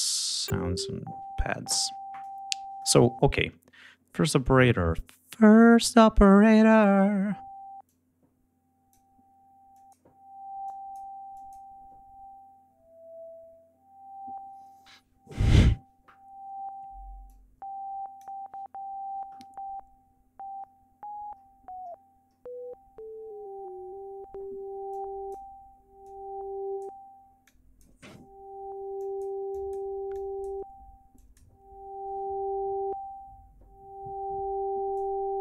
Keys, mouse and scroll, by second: 0.1 click, 7.8-9.1 drag, 9.7 click, 10.6 click, 11.3 click, 17.2 click, 20.7 scroll up 2, 21.3-22.5 scroll down 4, 22.7 scroll down 2, 23.3-23.8 scroll down 2, 23.9 scroll up 2, 24.9 click, 26.0 click, 27.4 click, 28.9 click, 29.5 click, 30.1 click, 31.1 click, 34.9 click.